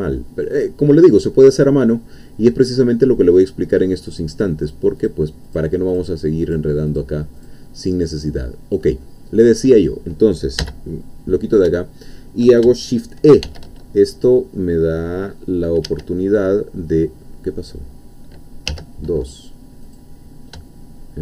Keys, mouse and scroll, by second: 0.5-2.0 drag, 2.5-3.1 scroll up 1, 4.6 click, 5.5 click, 6.4 click, 6.9 click, 7.4 click, 10.6 n, 13.6 shift+e, 16.6 scroll up 2, 17.0 scroll down 2, 18.8 2, 19.8 click.